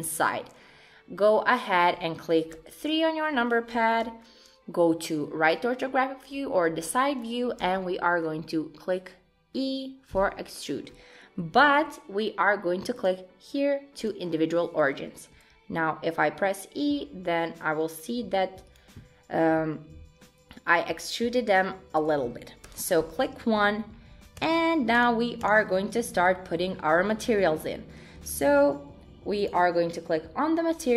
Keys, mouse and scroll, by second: 0.0 middle click, 2.5 KP_3, 7.6 e, 11.6 ctrl+z, 12.9 click, 15.4 e, 20.2 middle click, 22.7 KP_1, 23.2-23.7 scroll up 1, 23.7 scroll down 1, 23.9-24.4 scroll down 4, 24.4 shift+click, 25.0 click, 25.4 click, 26.2 shift+scroll down 1, 26.3 shift+middle click, 26.7 scroll up 4, 27.1 shift+middle click, 27.7-28.3 scroll down 2, 28.3 shift+middle click, 29.4 click.